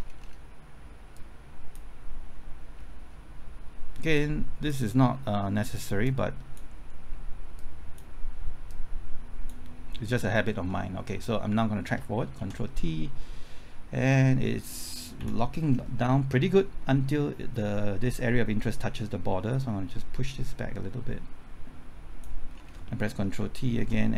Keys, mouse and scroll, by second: 1.1-2.6 drag, 2.8-4.1 scroll up 1, 4.1-8.6 drag, 10.6-11.1 scroll down 1, 11.1-11.5 scroll up 1, 12.4 ctrl+t, 15.1 Left, 15.6-16.7 scroll up 1, 17.6-19.5 scroll down 1, 19.5-22.5 drag, 22.5-23.3 scroll down 1, 23.3 typing, 23.7 ctrl+t.